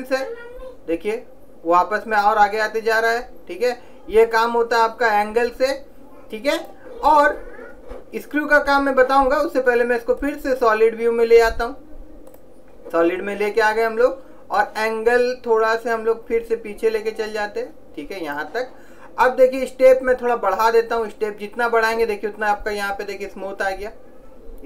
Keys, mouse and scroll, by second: 10.3 click, 14.7 click, 20.4 click, 22.7-24.6 middle drag.